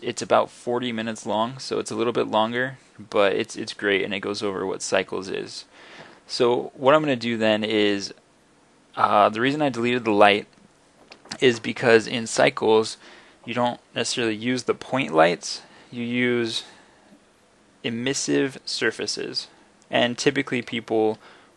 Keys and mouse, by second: 1.4 middle click, 2.7-3.0 drag, 3.0 middle click, 3.7 middle click, 7.0 middle drag, 8.8 middle click, 16.0-17.6 middle drag.